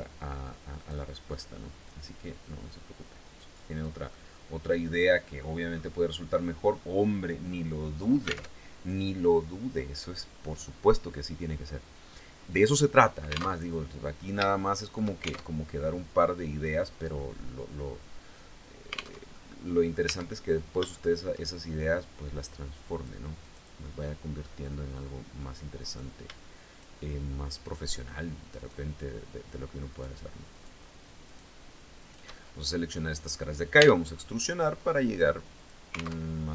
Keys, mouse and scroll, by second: 0.3 click, 1.4-3.5 drag, 3.7-5.1 middle drag, 5.3-5.6 scroll down 1, 5.9 scroll up 1, 8.1 alt+Tab, 13.1 alt+Tab, 14.0 shift+click, 15.0 alt+shift+Tab, 18.7 alt+Tab, 18.9 alt+click, 18.9 alt+middle click, 19.7 Tab, 19.9-20.3 scroll up 1, 20.5 shift+middle click, 22.4 right click, 23.0 right click, 23.4 middle click, 25.4 right click, 26.3 shift+right click, 27.2 shift+right click, 28.1 shift+right click, 29.5 shift+right click, 30.1 shift+right click, 30.9 shift+right click, 31.6 shift+right click, 32.0 shift+scroll down 2, 32.3 click, 33.3 e, 35.1 click, 35.8 alt+Tab.